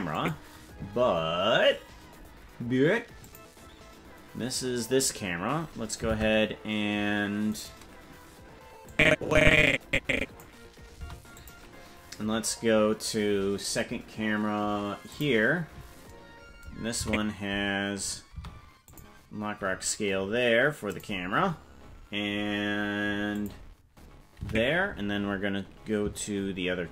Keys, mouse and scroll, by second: 0.1 click, 3.2 click, 6.1 ctrl+Tab, 7.5 right click, 8.8-10.4 drag, 10.9 i, 15.0 click, 17.0 Left, 18.3 i, 20.8 click, 23.3 click, 24.4 Right.